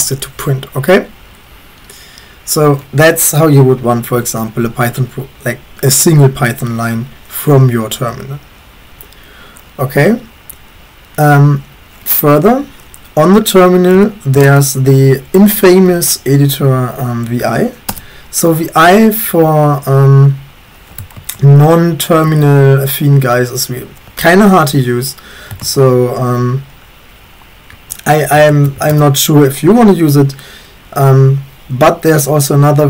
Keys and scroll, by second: 14.0-15.5 typing, 17.9 Return, 21.2 typing, 22.3 BackSpace, 25.7 typing, 27.7-29.2 typing.